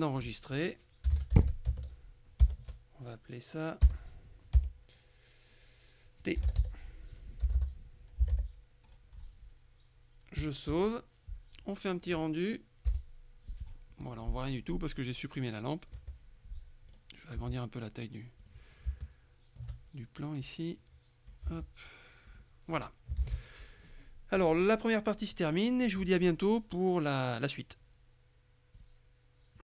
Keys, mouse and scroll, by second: 1.2 KP_1, 1.4 d, 1.8 shift+c, 3.9 BackSpace, 6.2-8.9 typing, 10.5 click, 13.0 F12, 16.0 Escape, 17.0 middle click, 17.5 s, 18.5 click, 19.0 shift+middle click, 20.5-21.9 drag, 21.6 s, 22.4 click, 23.3 ctrl+w, 23.4 ctrl+click, 28.8 click, 29.6 click.